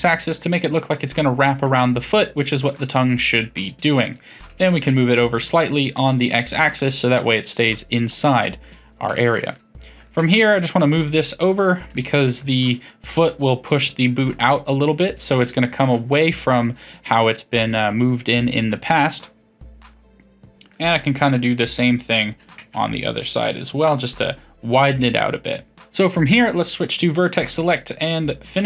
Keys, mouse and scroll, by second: 2.1-4.5 middle drag, 4.5 g, 6.7-9.2 middle drag, 9.2 click, 9.5-10.2 middle drag, 10.2 g, 11.9-21.4 middle drag, 21.4 click, 21.8-22.4 middle drag, 22.4 g, 24.0-25.8 middle drag, 25.8 1, 27.4 click, 28.0 shift+click, 28.5 shift+click.